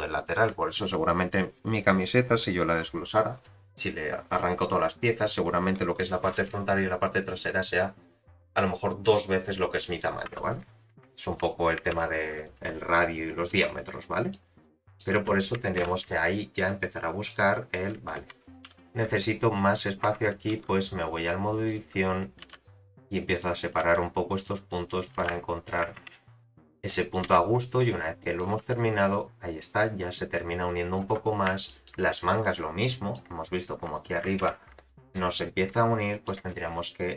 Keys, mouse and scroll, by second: 2.2 scroll up 1, 11.9 shift+Left, 13.1-14.7 scroll down 3, 13.5 space, 14.7-16.3 middle drag, 15.3 space, 15.8 shift+Left, 17.2 click, 18.2 z, 18.6 1, 19.0-20.0 scroll up 1, 20.0 Tab, 20.0 scroll up 2, 20.5 1, 21.6 click, 22.4 g, 23.4 click, 23.8 g, 24.7 click, 25.1 g, 26.0 Tab, 26.6-27.1 scroll down 4, 26.9 middle click, 27.2 z, 27.8 scroll up 4, 28.2 middle click, 28.4 space, 31.1 space, 31.3 scroll down 2, 31.6 shift+middle drag, 32.0-32.4 middle drag, 32.8-34.2 middle drag, 34.4 shift+Left, 35.3 middle click.